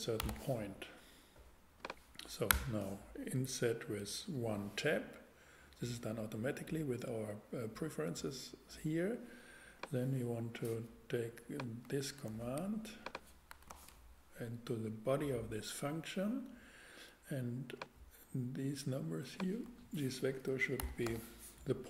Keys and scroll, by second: 0.2 p, 0.3 t, 2.5 Return, 12.3 super+x, 13.5 super+Return, 13.7 super+v, 19.6 BackSpace, 20.8 p, 21.0 t.